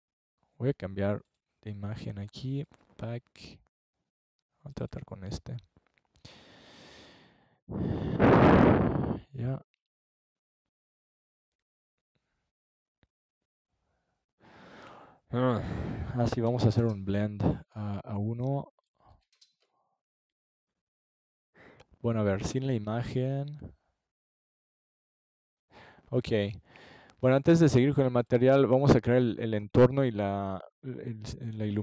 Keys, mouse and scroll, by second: 3.4 click, 4.1 click, 5.7-7.5 drag, 7.6 click, 8.3 KP_0, 9.7 KP_3, 10.4-11.9 drag, 13.1-14.6 right drag, 16.7-18.6 drag, 17.9-19.0 right drag, 18.9 click, 20.4 click, 21.2 KP_0, 22.9 right click, 23.9 KP_0, 27.0-28.7 drag.